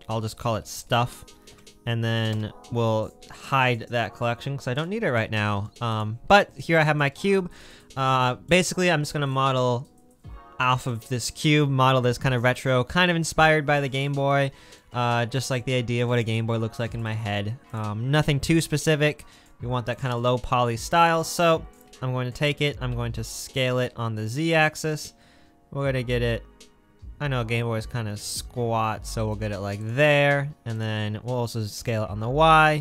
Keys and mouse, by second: 0.7 f, 4.8-7.0 drag, 7.0-12.7 middle drag, 12.7 click, 13.1-17.7 middle drag, 17.8-19.1 middle drag, 22.9 s, 26.1-29.0 drag, 31.8 s, 31.9-32.8 drag.